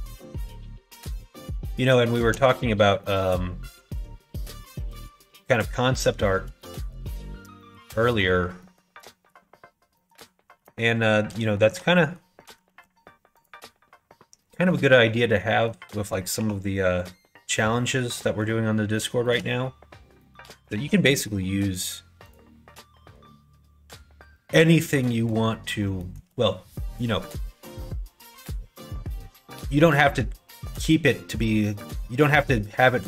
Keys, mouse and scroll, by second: 2.1 middle click, 3.0 middle click, 3.9 3, 4.4 click, 5.3 middle click, 6.6 shift+middle click, 7.6 middle click, 8.0 middle click, 8.6 shift+middle click, 9.0 middle click, 9.9 middle click, 11.5 shift+middle click, 12.0 middle click, 12.6 ctrl+r, 15.1 middle click, 16.1 middle click, 16.3 3, 17.0 click, 18.1 middle click, 19.2 shift+middle click, 20.2 middle click, 20.7 alt+z, 21.3 middle click, 22.2 click, 25.1 middle click, 26.0 shift+middle click.